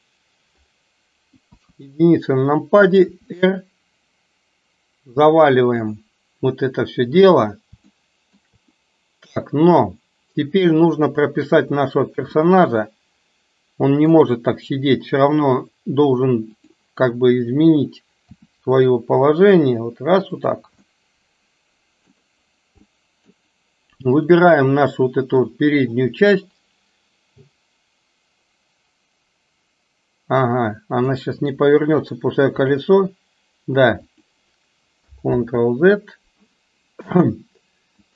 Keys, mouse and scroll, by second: 1.4 KP_1, 3.0 r, 8.0-8.4 shift+middle drag, 12.4-14.1 middle drag, 16.5 click, 18.3 r, 20.9-22.3 middle drag, 23.1-23.6 middle drag, 24.1-24.6 drag, 31.2 middle click, 32.6 r, 35.3 ctrl+z.